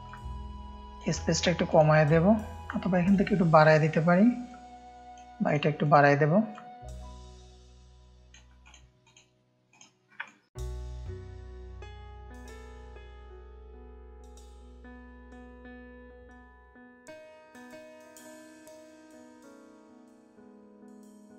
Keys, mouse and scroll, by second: 0.0 click, 1.6 click, 2.6 click, 4.4 click, 5.8 click, 6.5 click, 8.6-10.1 drag, 10.3 ctrl+click, 10.4 ctrl+space, 11.0 space, 11.1 click, 11.5 click, 12.2 shift+click, 13.0 click, 14.2 click, 14.7 ctrl+space, 14.7 ctrl+click, 15.8 click, 16.1 click, 16.1 space, 16.9 F1, 17.0 ctrl+space, 17.0 ctrl+click, 17.7 click, 18.6-20.0 drag, 20.2 ctrl+space, 20.3 ctrl+click.